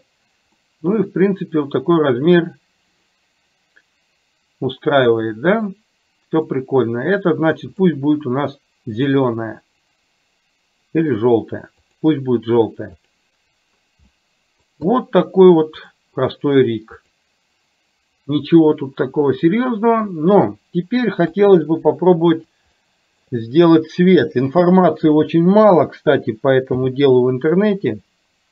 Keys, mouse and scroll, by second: 0.7 scroll up 1, 1.0-6.5 middle drag, 9.1-12.1 drag, 13.1 click, 14.2-14.7 middle drag, 15.0 drag, 15.8 click, 17.0 click, 21.3 KP_3, 22.8-23.3 shift+middle drag, 26.7 n.